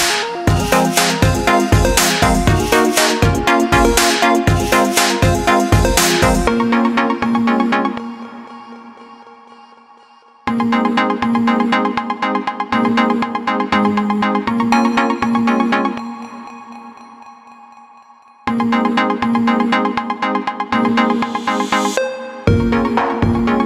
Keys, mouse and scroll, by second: 0.0-2.1 shift+middle drag, 2.1 s, 8.9 ctrl+a, 14.0-17.2 right drag, 22.6 click.